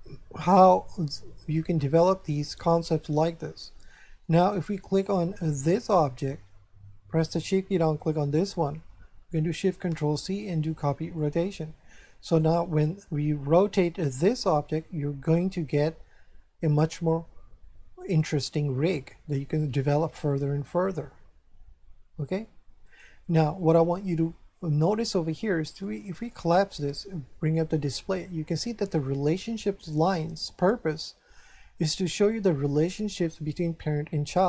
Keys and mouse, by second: 3.3 shift+middle click, 5.6 right click, 7.9 shift+right click, 9.9 ctrl+shift+c, 11.1 click, 12.2 right click, 13.6 r, 22.8 right click, 23.5 shift+middle click, 25.8 click, 27.4 click.